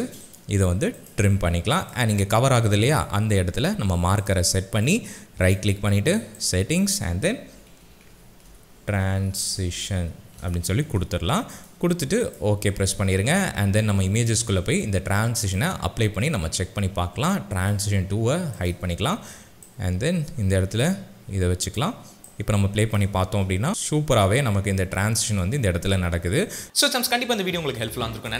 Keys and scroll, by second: 7.3-10.9 typing, 23.1 space.